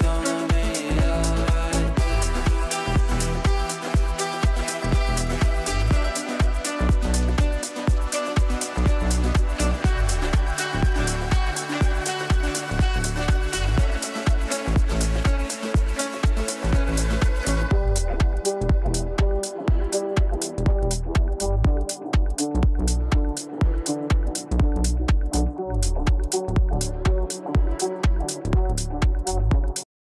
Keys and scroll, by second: 15.6 w, 22.1 F9.